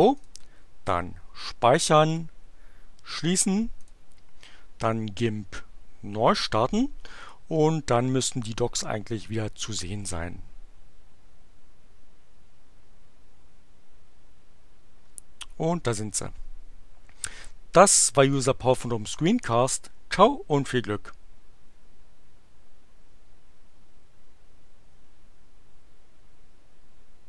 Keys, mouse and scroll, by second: 0.2 click, 2.1 click, 3.7 click, 7.2 click, 17.2 click, 18.2 click.